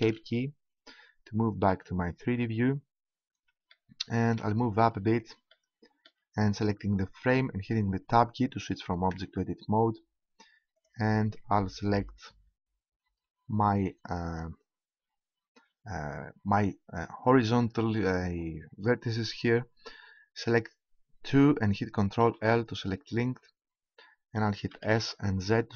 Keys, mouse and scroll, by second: 3.6 middle click, 4.6 middle click, 7.2-9.1 right drag, 9.1 Tab, 11.2-12.6 right drag, 14.2-15.9 right drag, 22.2 ctrl+l, 24.6 s.